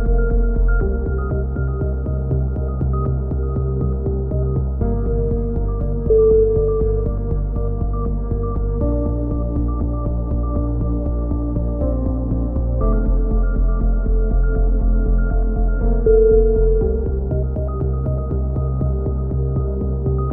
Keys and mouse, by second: 0.0 e, 1.8 e, 2.1 ctrl+z, 2.3 e, 2.7 click, 3.8 right click, 4.1 click, 4.9 click, 4.9 right click, 5.5 KP_3, 6.2-7.9 right drag, 7.0 z, 7.6 click, 8.2 right click, 8.3 z, 8.9 click, 10.9 click, 11.8 a, 11.9 z, 12.0 click, 12.6 ctrl+r, 12.7 click, 13.0 KP_3, 13.4 click, 14.0 click, 15.0 z, 15.2 right click, 15.3 click, 15.7 a, 16.0 click, 16.6 KP_7, 16.9-18.5 drag, 17.1 right click, 18.5 middle click, 19.0 click, 19.0 right click, 19.8 right click, 19.9 click.